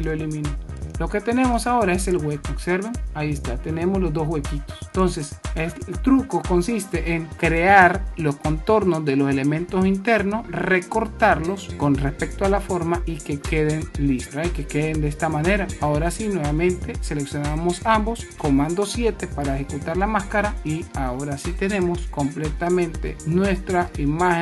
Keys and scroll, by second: 4.7 super+z, 19.7 super+7, 21.8 super+-.